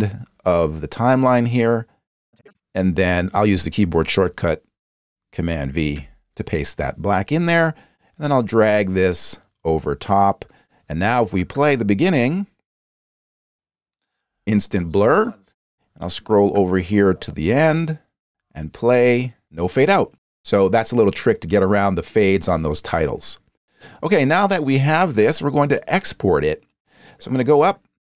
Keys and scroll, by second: 5.9 super+v, 12.2 space, 15.4 space.